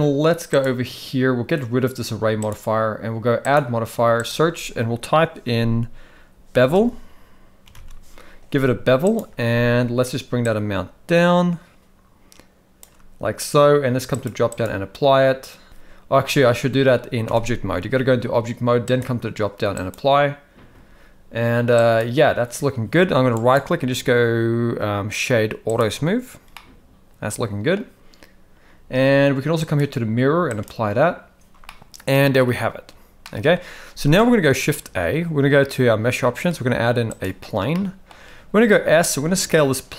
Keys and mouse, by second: 0.6 click, 2.5 click, 3.4-9.2 drag, 10.5-12.9 shift+drag, 14.2-15.2 drag, 17.3 Tab, 18.9-19.9 drag, 21.8 click, 23.4-25.8 right drag, 26.5-27.8 middle drag, 27.7 typing, 29.7-30.6 drag, 31.6-32.4 middle drag, 33.3 middle click, 34.1-34.5 middle drag, 34.8 shift+a, 37.7 middle click, 38.6 s.